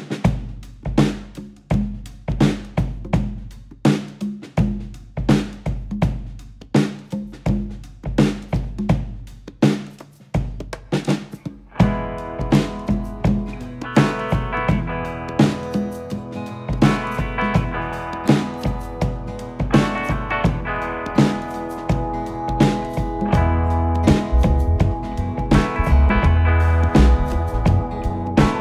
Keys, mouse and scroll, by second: 0.7 g, 6.4-8.0 scroll down 6, 8.0-11.0 middle drag, 12.1 KP_3, 16.0 KP_1, 17.4-20.6 scroll up 5, 20.6 z, 26.5 KP_7, 27.7-28.4 scroll up 3.